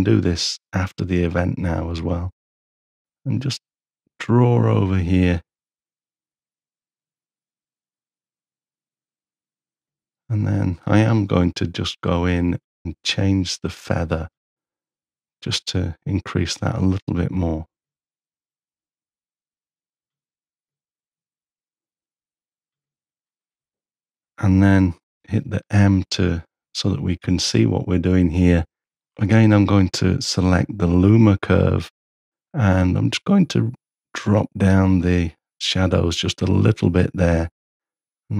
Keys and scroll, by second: 25.1 m.